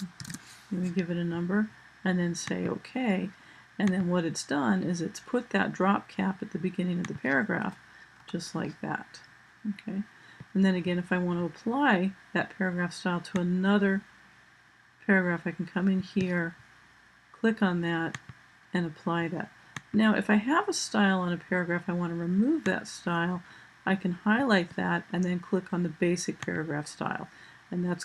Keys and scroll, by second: 1.5 typing.